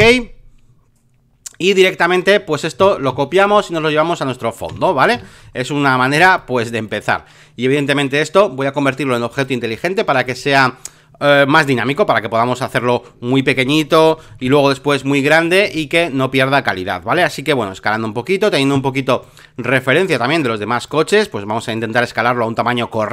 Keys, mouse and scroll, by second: 0.0-2.1 drag, 3.1 ctrl+c, 3.5 click, 4.7 ctrl+v, 5.5 alt+middle click, 5.9 middle click, 6.2 v, 6.4-8.8 drag, 9.3 right click, 10.3-11.4 drag, 11.7 ctrl+t, 12.5 click, 13.5 Return, 14.3 ctrl+t, 14.9 click, 15.6 Return, 17.1 ctrl+t, 18.0-23.1 drag.